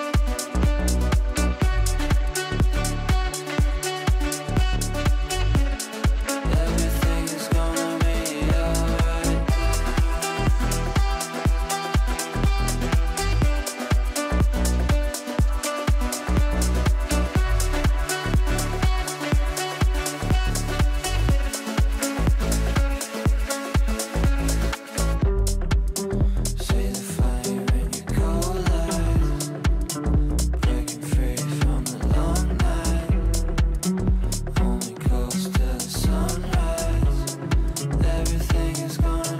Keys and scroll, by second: 4.2 g, 9.9 Delete, 17.5 Escape, 28.8 ctrl+z.